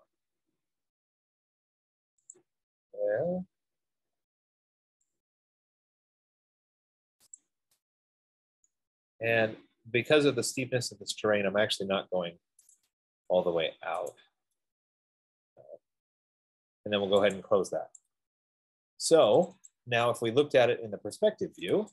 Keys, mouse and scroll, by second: 2.7 click, 3.3-3.8 scroll, 3.9-5.3 scroll, 5.3-5.9 scroll, 7.7 click, 8.3 scroll, 10.4 middle click, 13.0 click, 14.2 click, 14.4 click, 17.6 click, 19.8 click, 20.2 click, 20.4 F15.